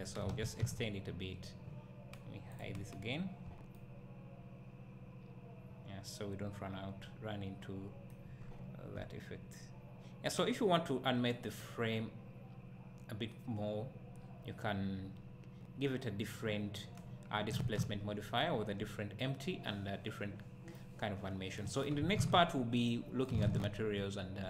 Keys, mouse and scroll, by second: 0.3 alt+a, 0.8 z, 2.5-3.8 drag, 3.8-8.6 right drag, 8.4 scroll up 1, 8.6 `, 9.6 right click, 18.4 `, 20.8 right click, 23.3-24.4 right drag, 24.1 `.